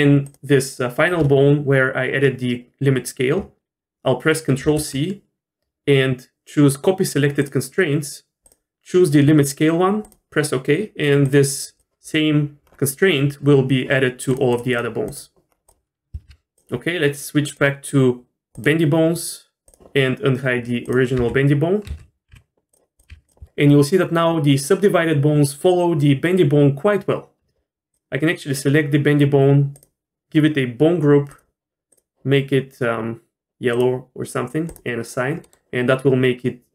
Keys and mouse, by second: 0.2 shift+click, 4.6 ctrl+c, 14.3 drag, 16.2 alt+h, 18.6-19.7 drag, 20.8 drag, 21.2 h, 21.9 ctrl+z, 22.3 g, 23.0 click, 23.1 g, 23.4 r, 29.8 click, 31.3 click, 31.9-33.9 drag, 34.7 click.